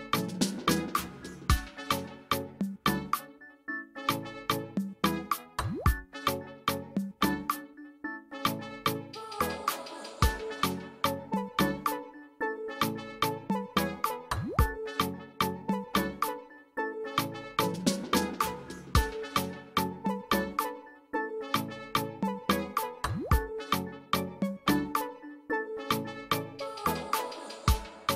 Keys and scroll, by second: 0.3 space, 2.9 space, 4.8 ctrl+space, 5.1 ctrl+space, 24.2 space, 25.5 space, 26.3 space, 27.2 space.